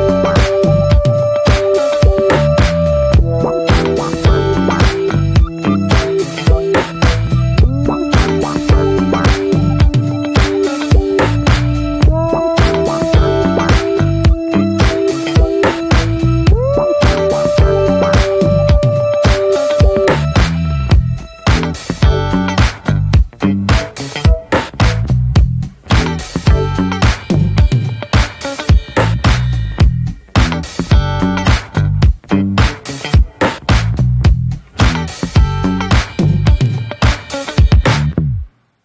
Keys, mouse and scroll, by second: 14.4 click, 14.8-15.2 scroll down 2, 15.2-16.9 scroll up 1, 16.9 click, 17.4 ctrl+z, 17.9 shift+click, 18.6 scroll down 4, 18.8 ctrl+z, 19.0-20.3 scroll up 2, 20.3-21.4 scroll up 2, 21.4-23.2 drag, 23.2 f, 24.4 click, 25.2 ctrl+z, 26.9-30.8 drag, 30.8 ctrl+z, 33.0-35.9 drag, 35.9 ctrl+z, 37.4-38.8 drag.